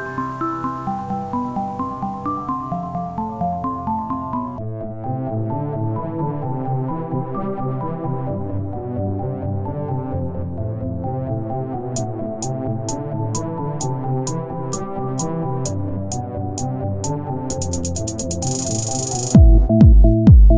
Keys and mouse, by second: 0.2 s, 2.5-3.6 drag, 3.6 Tab, 6.9 Tab, 7.6 s, 9.6 Tab, 9.9 click, 16.3-18.9 drag, 16.3 middle click, 16.3 right click, 17.3-19.2 middle drag, 19.2 Tab, 19.6 z.